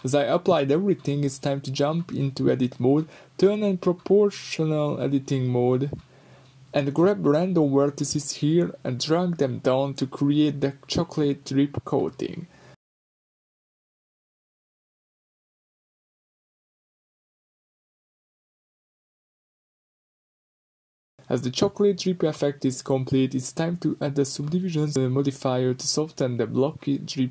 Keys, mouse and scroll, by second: 0.0 click, 0.5-2.0 shift+middle drag, 2.0-2.9 drag, 2.9 g, 3.9 Escape, 4.5 o, 4.9 g, 10.1 Escape, 10.5-15.0 drag, 12.3 g, 15.0 Tab, 15.3-16.2 middle drag, 16.2-16.6 scroll up 2, 16.7 middle click, 17.3 middle click, 21.1 ctrl+z, 26.9 g.